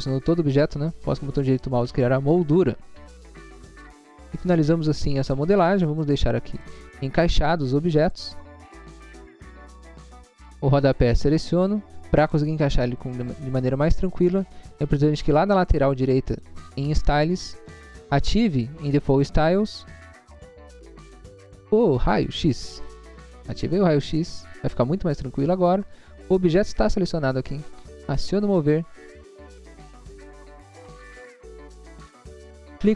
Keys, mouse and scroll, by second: 1.4 click, 3.0-4.1 typing, 6.7 click, 8.2 scroll down 1, 8.5 middle click, 8.9 middle click, 8.9 scroll down 1, 9.5 scroll down 1, 9.7 middle click, 10.1 scroll down 1, 10.7 scroll down 1, 11.1 click, 16.3 click, 19.0 click, 19.5 click, 22.7 click, 25.9 scroll down 1, 26.5-27.2 scroll up 1, 27.2 scroll up 1, 28.4 click, 29.9 scroll up 1, 30.6 scroll up 1.